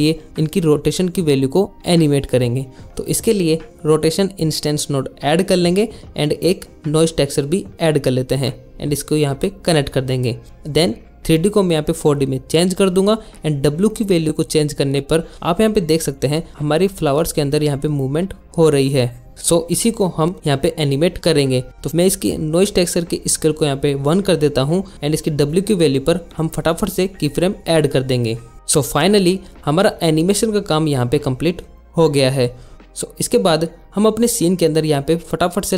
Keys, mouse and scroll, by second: 2.3 click, 3.7 shift+a, 4.4 click, 4.5 shift+a, 5.1 click, 9.7-17.3 drag, 25.1 drag, 35.1-35.5 drag, 35.6 click.